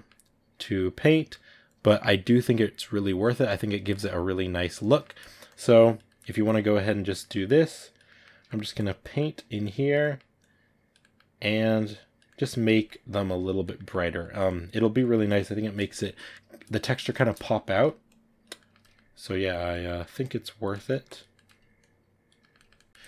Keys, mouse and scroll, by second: 0.1 click, 1.0 middle click, 1.5-3.2 drag, 3.2 ctrl+middle click, 3.9 click, 4.8 shift+middle click, 5.3 click, 5.9 middle click, 6.4 click, 7.1 middle click, 7.5 click, 7.9 middle click, 8.6 click, 9.0 middle click, 9.5 click, 9.9 middle click, 10.3 click, 10.9 middle click, 11.3 click, 12.1 middle click, 13.0 click, 13.6 middle click, 14.3 click, 14.7 ctrl+middle click, 15.1-16.7 drag, 16.7-17.9 shift+middle drag, 17.9 click, 18.5 ctrl+middle click, 19.2 click, 19.7 middle click, 20.1 click, 20.6 ctrl+middle click, 20.9 click, 21.2 middle click, 21.7 click, 22.3-23.0 ctrl+middle drag.